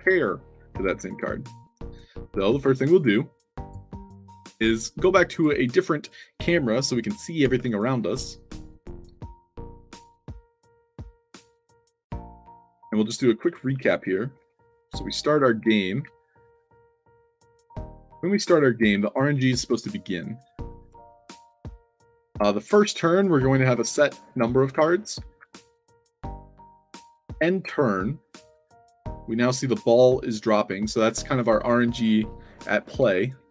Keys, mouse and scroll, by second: 0.0-1.5 typing, 3.6 click, 4.1 click, 5.3 click, 7.4 Tab, 8.8-14.4 typing, 10.0 click, 16.0 s, 20.5 d, 20.9 w, 23.7 w, 24.9-25.9 typing, 33.0 e.